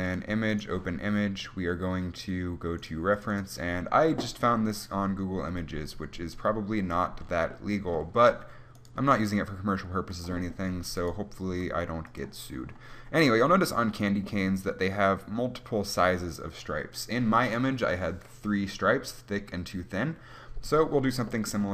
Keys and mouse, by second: 3.8 click, 4.7 middle click, 5.1 click, 5.9-7.5 middle drag, 7.5-9.1 drag, 9.1-10.3 right drag, 9.3 g, 10.3-12.3 drag, 11.7 g.